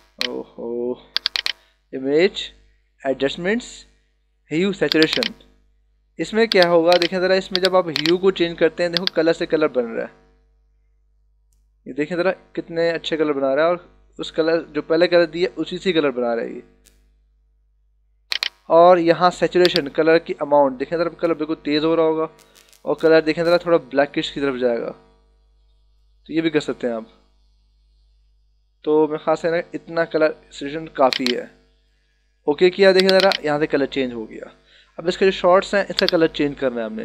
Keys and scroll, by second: 0.3 space.